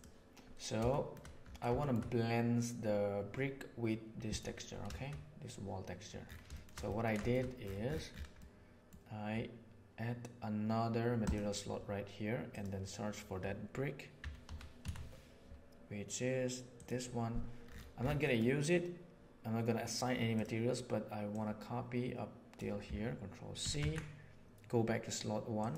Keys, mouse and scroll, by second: 0.8 shift+middle drag, 1.7 shift+middle click, 6.5 shift+middle click, 6.8 ctrl+middle click, 7.2 shift+middle click, 8.4 middle click, 11.2 click, 12.4-13.4 drag, 18.2 middle click, 20.3 click, 21.4-22.5 drag, 23.6 ctrl+c, 23.7 ctrl+c, 25.5 click.